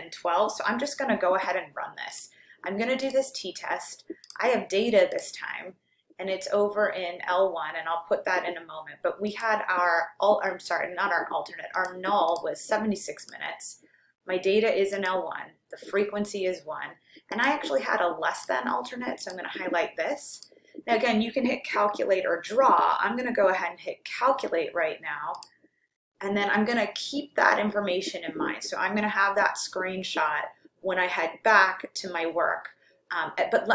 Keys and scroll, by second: 2.3 Down, 3.1 Return, 4.2 Left, 5.1 Return, 9.3 Down, 11.8 7, 12.4 6, 13.2 Down, 15.1 Down, 17.4 Down, 18.4 Right, 19.3 Return, 20.5 Down, 25.4 Return.